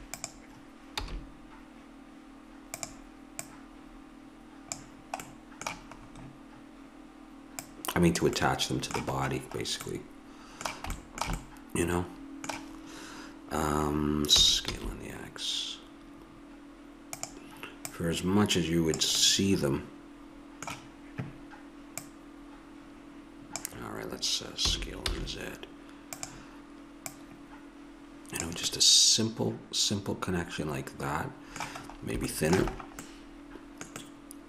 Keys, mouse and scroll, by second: 1.0 s, 3.4-5.2 drag, 7.6-9.9 drag, 14.3 s, 17.9-24.6 drag, 24.6 s, 27.0-28.7 drag, 28.7 middle click, 30.8-32.7 middle drag.